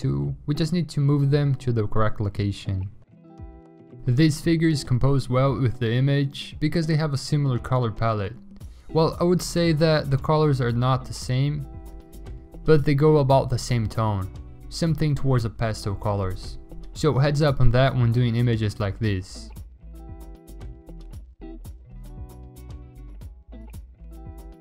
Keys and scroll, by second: 5.8-8.0 typing, 8.7 ctrl+d, 9.5 ctrl+alt+z, 9.6 ctrl+alt+z, 10.1 ctrl+d, 10.3 m, 11.2 v, 11.8 ctrl+d, 12.2-14.1 typing, 12.8 ctrl+d, 19.4 ctrl+d, 19.5-22.1 typing, 20.9 ctrl+d, 22.3 ctrl+t, 22.8 Return, 23.6 ctrl+d, 23.8 m, 24.2 v.